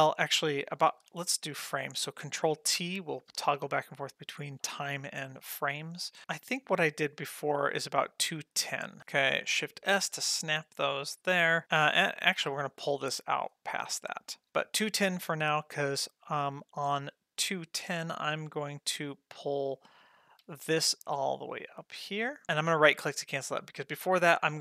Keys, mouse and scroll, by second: 0.1 middle click, 0.4 ctrl+middle click, 2.8 ctrl+t, 3.7 ctrl+t, 4.7 ctrl+t, 5.6 middle click, 6.2 click, 7.2-9.0 drag, 9.0 ctrl+shift+z, 9.7 shift+s, 11.9 middle click, 12.5 g, 13.7 middle click, 14.4 ctrl+middle click, 16.5 click, 20.4 g.